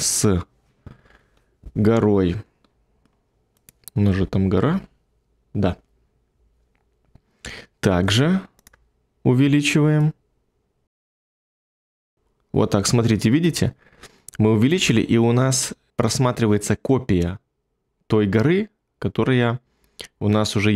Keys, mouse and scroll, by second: 4.1 1.